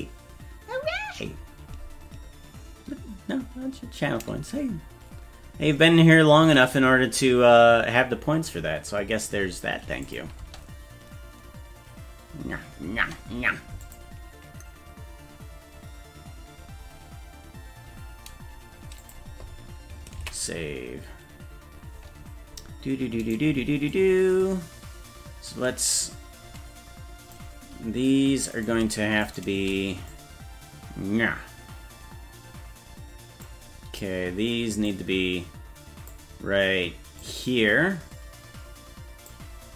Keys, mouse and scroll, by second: 10.1 click, 10.4 space, 13.0 space, 13.9 click, 19.0 click, 20.4 ctrl+s, 23.3 right click, 24.0-27.4 drag, 28.7 right click, 29.4 shift+right click, 30.1-33.5 drag, 34.9-36.2 drag, 37.2-39.4 drag.